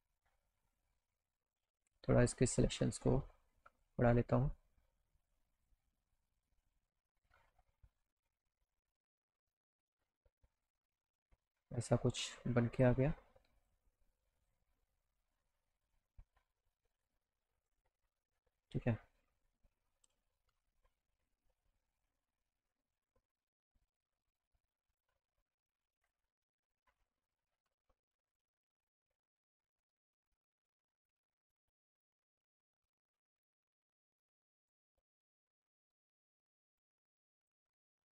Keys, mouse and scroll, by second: 2.7 click, 3.8 ctrl+z, 4.7-5.7 drag, 6.5 click, 8.3 click, 9.9 click, 11.2-12.8 drag, 13.6 click, 14.4 click, 17.0 click, 17.6 click, 18.7 scroll down 1, 19.2 middle click, 19.3 middle click, 20.7 z, 24.0-25.0 drag, 26.0 click, 26.7 click, 28.8 click, 30.3 click, 31.3 alt+middle click, 32.2-32.7 scroll up 4, 33.3 alt+scroll up 2, 34.5 click, 35.6 click, 37.5 click.